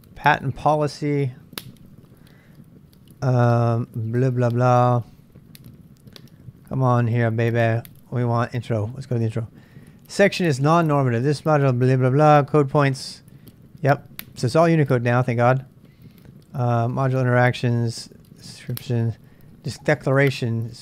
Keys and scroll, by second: 6.9 space, 7.9 k, 8.6 l.